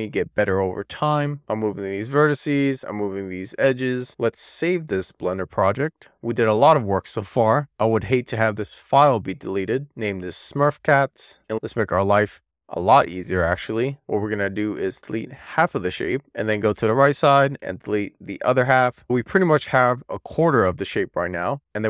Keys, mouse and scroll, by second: 1.6 middle click, 2.2 scroll up 3, 2.3 scroll down 2, 2.5 middle click, 2.7 click, 2.9 2, 3.3 ctrl+shift+click, 3.4 middle click, 3.6 super+z, 3.8 1, 4.0 alt+q, 4.5 ctrl+q, 9.2 super+s, 11.2 alt+z, 11.6-13.9 drag, 14.4 x, 16.2 shift+middle click, 16.3-16.8 scroll up 2, 16.8 alt+z, 17.1 click, 18.4 x, 19.4 middle click, 20.1-20.8 scroll down 3, 20.8 middle click, 21.2 shift+middle click.